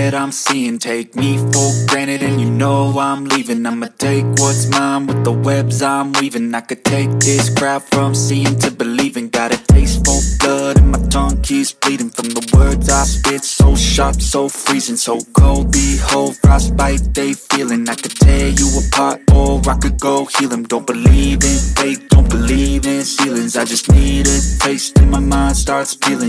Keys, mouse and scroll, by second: 0.8 click, 1.4 click, 2.0-3.9 drag, 4.4 g, 6.1 r, 7.7-9.6 drag, 10.3 click, 11.0 g, 13.2 click, 14.4 click, 15.3 click, 16.5 click, 17.4-18.4 drag, 18.4 KP_0, 18.5 KP_0, 20.6 space, 25.1 click.